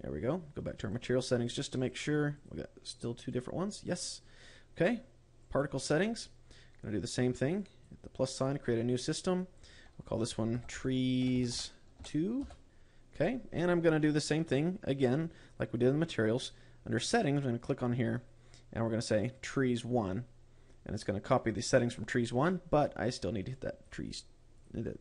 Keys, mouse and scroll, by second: 0.3-0.6 scroll up 4, 1.3 click, 2.3 click, 2.9 click, 3.4 click, 3.8 click, 4.3 click, 5.9 click, 8.1 click, 10.1 click, 17.5 click.